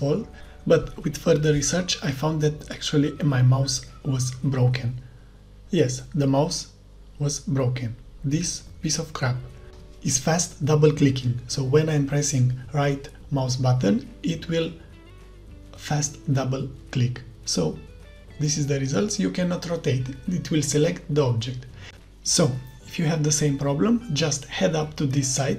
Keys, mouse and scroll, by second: 0.0-4.2 typing, 0.0-4.2 right drag, 9.2 right click, 14.2 right click, 14.8 right click, 15.7 click, 17.0-18.2 right drag, 17.3 d, 17.9 w, 18.4 right click, 18.9-20.9 right drag, 21.0 right click, 21.1-22.6 right drag, 22.0 d, 23.2 right click, 23.4 d, 24.7 d, 25.0 right click, 25.3 a.